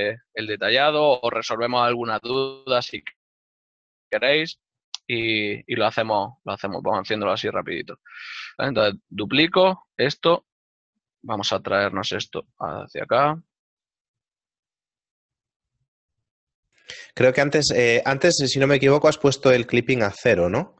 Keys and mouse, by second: 6.9 right click, 16.7 right click, 18.1 click, 18.4 right click.